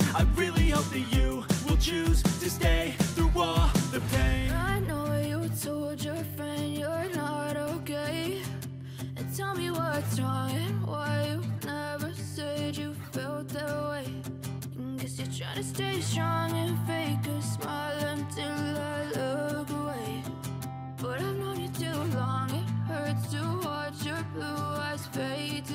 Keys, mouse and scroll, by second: 0.2 double click, 1.4-3.0 typing, 3.8 Return, 4.1-5.6 typing, 25.6 right click.